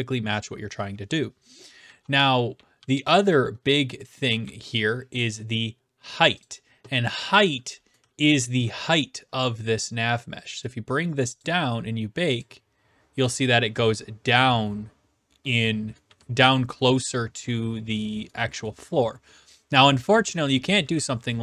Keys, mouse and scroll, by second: 1.6-4.5 typing, 3.8 right click, 4.8 right click, 6.4 click, 8.0 typing, 8.7 right click, 11.4 click, 12.4 click, 16.1 q, 17.0 right click, 18.4 e, 18.7 right click, 19.8 click.